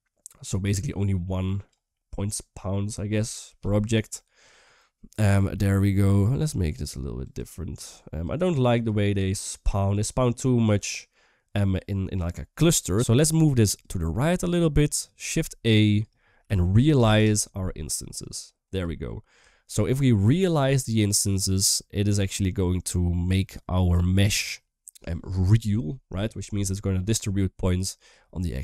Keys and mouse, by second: 1.7-2.8 middle drag, 4.4-5.4 typing, 5.0 click, 6.5 click, 7.0 click, 7.5 click, 8.0 typing, 8.0 click, 8.6 click, 9.2 click, 9.7 click, 12.8 typing, 13.4 click, 13.9 typing, 14.3 click, 15.2 shift+a, 19.3 shift+middle click.